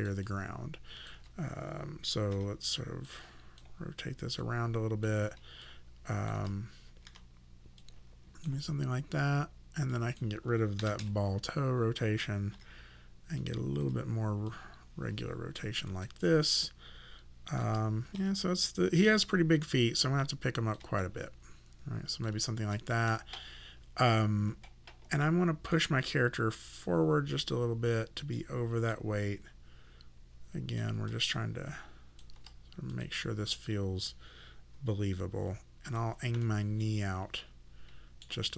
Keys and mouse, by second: 0.3 alt+click, 2.3 e, 3.1 click, 5.7 alt+click, 7.1 w, 7.8 click, 9.9 click, 10.8 KP_0, 11.0 Return, 11.0 KP_Enter, 12.5 e, 13.4 right click, 13.8 e, 14.5 click, 15.9 alt+right click, 16.2 alt+click, 18.2 w, 19.0 click, 21.0 click, 25.7 click, 28.9 click, 31.1 alt+click, 35.9 click, 36.4 middle click.